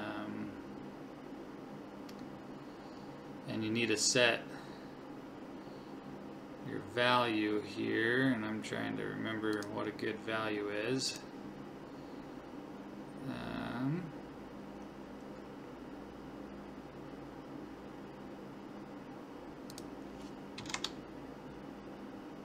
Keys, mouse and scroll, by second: 2.6-4.6 scroll down 1, 4.6 scroll down 1, 9.6 click, 19.7 click.